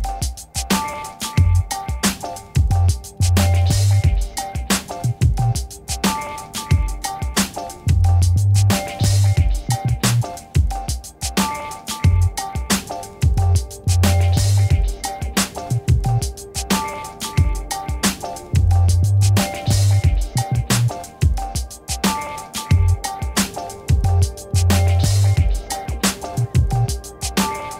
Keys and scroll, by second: 0.5 Return, 0.6 space, 10.0 d, 10.8 alt+BackSpace, 20.8 1.